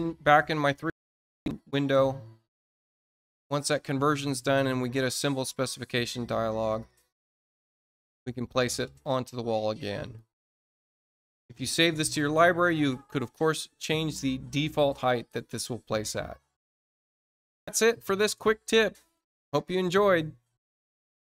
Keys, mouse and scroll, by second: 0.3 middle click, 0.8-1.3 scroll up 1, 1.5 middle click, 2.1 scroll up 1, 5.5 click, 7.4 scroll up 1, 8.3 middle click, 9.9 click, 12.7 space, 14.5 click, 16.1 click.